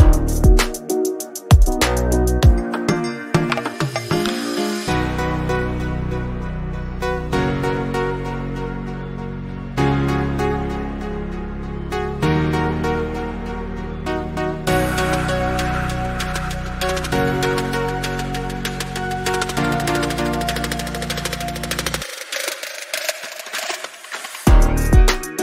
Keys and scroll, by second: 3.6 ctrl+?, 10.8 t, 13.1 Return, 18.8 ctrl+g.